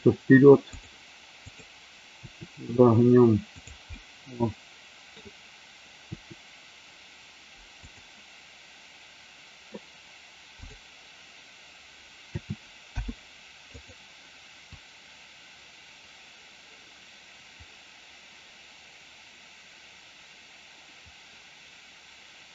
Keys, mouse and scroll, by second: 0.7 click, 1.3-1.7 drag, 2.1 r, 3.5 click, 3.9-5.0 middle drag, 6.0 r, 7.8 click, 12.2 a, 12.8 i, 14.7-22.5 drag.